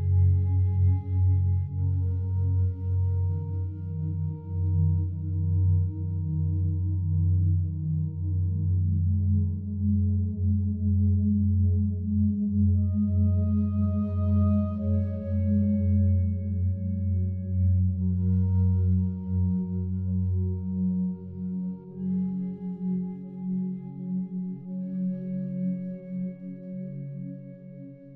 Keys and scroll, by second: 4.8 ctrl+z, 14.6 ctrl+z.